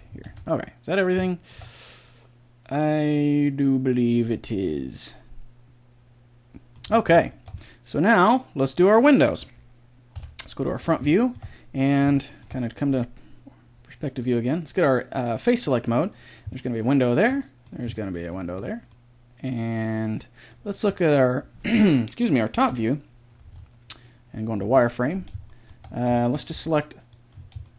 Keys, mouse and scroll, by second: 0.3 middle click, 0.3 a, 0.9 middle click, 1.3 middle click, 1.9 middle click, 2.5 middle click, 4.5 middle click, 6.9-10.1 middle drag, 10.1 KP_1, 11.1 middle click, 11.5 middle click, 14.2-15.9 drag, 16.1-18.9 right drag, 20.1-22.7 middle drag, 22.7 KP_7, 23.5-27.7 middle drag, 24.6 z, 26.5 b.